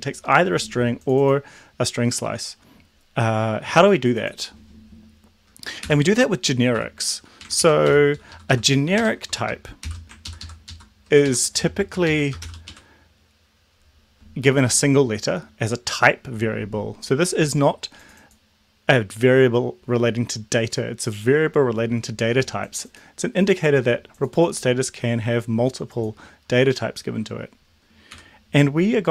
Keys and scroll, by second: 5.9 Delete, 6.8 Delete, 7.4 Right, 7.9 End, 8.3 ctrl+Left, 9.0 ctrl+shift+Right, 9.9 shift+t, 10.3 ctrl+Left, 11.3 ctrl+Right, 11.6 shift+,, 12.1 Left, 12.4 shift+t, 12.7 Right, 28.2 Delete.